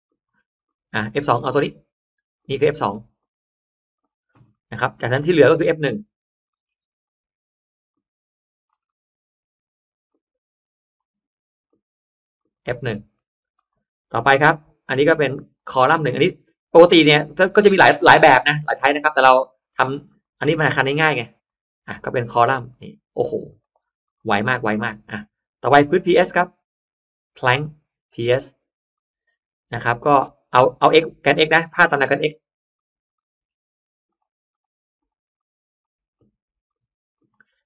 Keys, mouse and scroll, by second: 0.5-0.9 scroll up 1, 0.6 middle click, 0.9-1.3 scroll down 1, 1.5-1.9 scroll up 1, 2.3-3.2 drag, 3.9 click, 4.4 middle click, 4.8 scroll down 1, 5.1 middle click, 6.4 middle click, 6.5-6.8 scroll up 1, 6.7 space, 6.8 click, 7.8 click, 8.7 middle click, 10.0-10.8 drag, 11.5 click, 12.3 click, 13.1 middle click, 13.2-13.7 scroll up 1, 13.5 drag, 13.5 space, 14.1-15.3 drag, 16.5 click, 17.5 click, 18.8 click, 19.6 middle click, 19.7-20.1 scroll down 1, 19.9 space, 20.0 click, 20.7 click, 21.9 click, 22.6 click, 23.4 click, 23.8 space, 23.9 click, 24.3 middle click, 24.9 scroll down 1, 25.3 scroll up 1, 26.1 click, 27.3 click, 28.8 click, 32.7 click, 33.1 middle click, 33.6 middle click, 34.0 drag, 34.4 drag, 34.9 drag, 35.3 drag, 35.7-36.3 drag, 36.5 drag, 37.1 click.